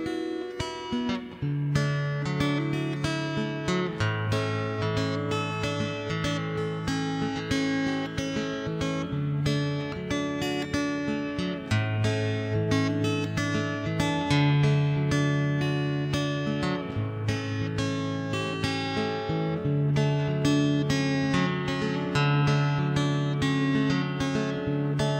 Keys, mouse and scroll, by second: 0.3 ctrl+shift+b, 1.7 click, 1.9 middle click, 2.5 click, 2.7 KP_0, 3.1 click, 3.6 middle click, 4.1 click, 4.4 KP_0, 4.8 middle click, 6.4 Tab, 6.6 ctrl+s, 6.8 middle click, 7.4 right click, 7.7 middle click, 7.8 shift+d, 8.2 m, 8.6 middle click, 8.6 1, 9.6 middle click, 10.6 middle click, 10.9 shift+space, 11.2 right click, 12.3 right click, 12.5 click, 13.0 click, 13.4 middle click, 13.9 ctrl+KP_1, 14.1 middle click, 14.3 shift+space, 14.5 z, 14.7 right click, 14.8 Tab, 15.1 a, 15.3 c, 16.5 ctrl+l, 16.8 middle click, 17.3 ctrl+KP_3, 17.5 middle click, 17.9 r, 19.2 middle click, 20.4 middle click, 20.6 Tab, 20.9 alt+c, 21.2 shift+space, 21.8 click, 22.2 KP_0, 23.2 middle click, 24.9 shift+space.